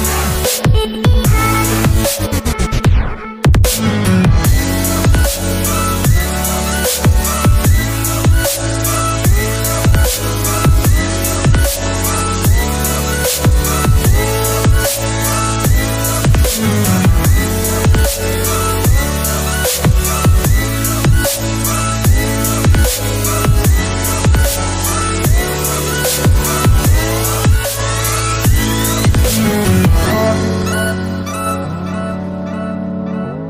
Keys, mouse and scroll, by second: 2.9 alt+Tab, 8.0 double click, 8.8 typing, 9.8 Return, 10.6 alt+Tab, 13.0 alt+Tab, 17.3 double click, 18.0 typing, 18.7 Return, 21.4 alt+Tab, 25.6 alt+Tab, 25.6 double click, 26.4 typing.